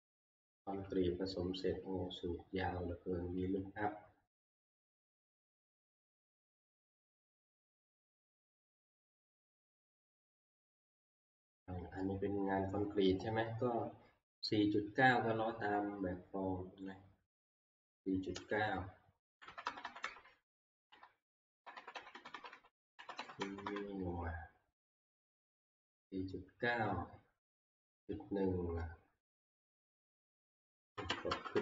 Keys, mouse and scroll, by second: 0.5 click, 0.6 F2, 3.4 Escape, 6.4-6.8 scroll, 8.5 scroll, 12.2 scroll, 13.8 scroll, 16.9 click, 18.5 click, 19.3 Right, 19.5 Right, 19.7 Right, 19.8 Right, 20.0 Right, 20.7 Right, 20.9 Right, 21.6 Right, 21.8 Right, 22.0 Right, 22.1 Right, 22.3 Right, 22.5 Right, 23.0 Right, 23.2 Right, 23.5 Right, 23.7 Right, 25.0 Right, 25.8 Right, 27.5 Left, 29.5 click, 30.0 Left, 31.3 Up.